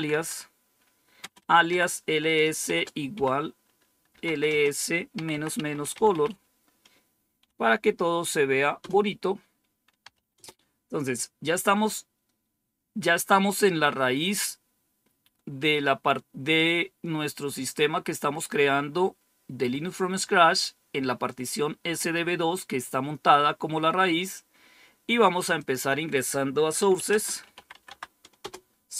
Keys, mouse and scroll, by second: 0.0-6.7 typing, 8.5-10.7 typing, 25.5 click, 26.4-28.9 typing, 28.3 Return.